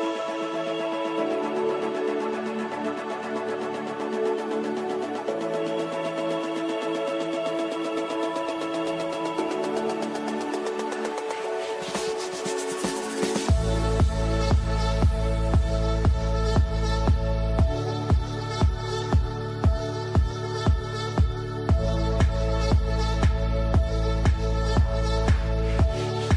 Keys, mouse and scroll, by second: 2.9 right click, 3.9 shift+click, 4.2 c, 4.8 click, 5.3 F3, 6.2 F4, 6.9-8.7 drag, 8.7 F2, 9.0-10.3 drag, 11.1-14.0 shift+drag, 14.0 shift+Page_Up, 14.1 shift+click, 14.3 shift+c, 16.7-23.1 drag, 23.6 shift+click, 23.9 c, 25.8-26.3 drag.